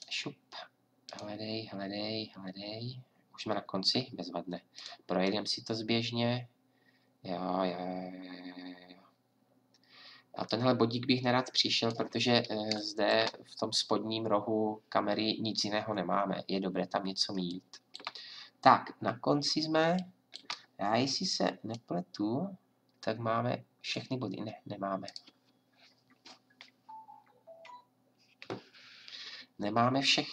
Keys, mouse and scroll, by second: 1.0-2.9 drag, 4.7-10.3 drag, 21.7 click.